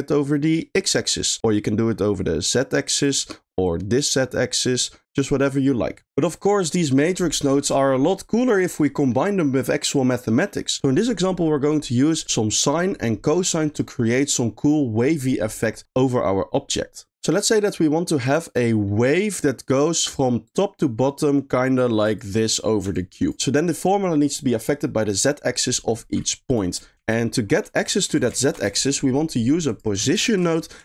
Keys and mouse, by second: 1.4-3.0 shift+drag, 3.7-5.0 shift+drag, 6.1 middle click, 18.2 click, 18.7 middle click, 20.5-22.2 drag, 22.9 ctrl+click, 27.0 shift+a, 29.9 click, 30.2 shift+a.